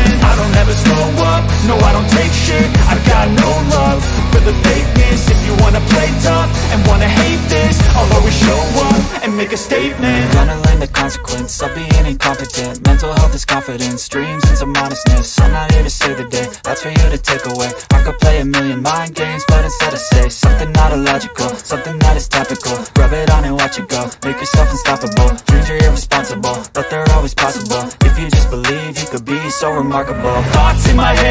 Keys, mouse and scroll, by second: 4.6-6.6 middle drag, 7.8 middle click, 13.4 middle drag, 14.3 middle click, 14.8 click, 17.2 click, 21.6 click, 26.3-27.7 drag, 27.7 click.